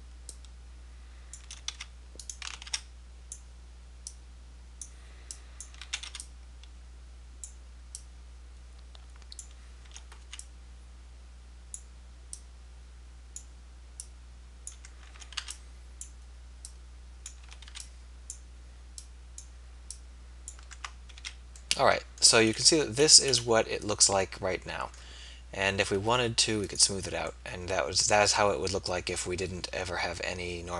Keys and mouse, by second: 1.8 b, 2.6 a, 2.8 b, 4.3-5.7 drag, 6.2 a, 9.9 a, 10.3 b, 15.4 a, 15.4 b, 17.5 a, 17.7 b, 21.1 Tab, 21.1 z, 29.4-30.7 middle drag.